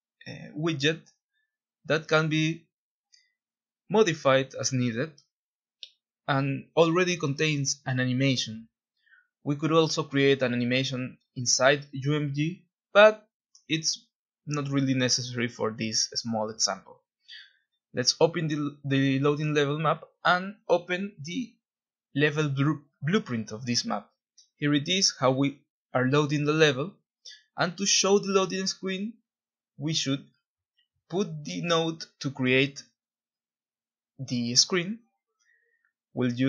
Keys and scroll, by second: 0.0-2.2 typing, 3.5 typing, 3.7 Return, 4.7 typing, 9.0 3, 9.2 Tab, 9.3 Tab, 9.4 Return, 24.9 alt+Tab, 32.8-33.1 Right, 34.2-36.4 typing.